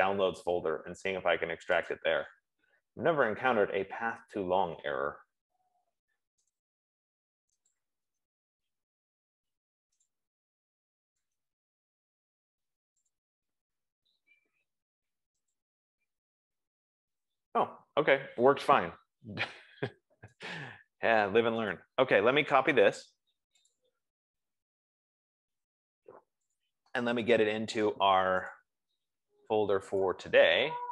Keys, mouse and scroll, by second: 2.2 click, 7.0 click, 8.1 click, 8.5 right click, 10.5 click, 12.0 right click, 13.9 click, 16.0 click, 20.8 click, 22.0 right click, 24.1 click, 27.0 click, 29.0 click, 30.3 click.